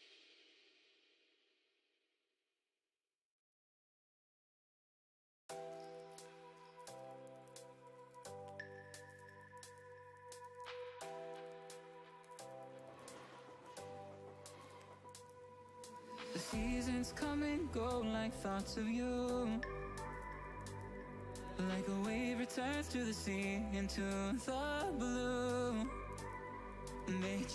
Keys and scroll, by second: 4.7 ctrl+0, 11.5 ctrl+=, 12.2 ctrl+0, 25.5 ctrl+=, 25.9 ctrl+-, 26.6 ctrl+=, 27.3 ctrl+-.